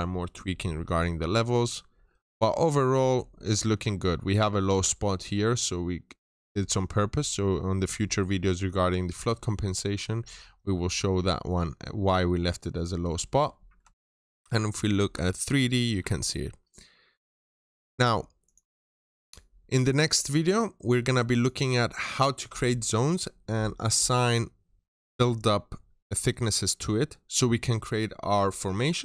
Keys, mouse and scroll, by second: 1.3 middle click, 2.3 scroll down 1, 2.7 middle click, 3.9-4.9 scroll up 1, 5.4-6.0 scroll down 1, 11.4-12.5 scroll up 1, 12.5 scroll down 1, 12.7 middle click, 13.2 scroll down 1, 13.7-15.4 ctrl+shift+middle drag, 14.1 ctrl+shift+click, 15.1-15.4 ctrl+shift+scroll up 2, 15.6 scroll down 1, 15.9-17.5 middle drag, 16.1 ctrl+shift+click, 18.3 click, 21.6 right click.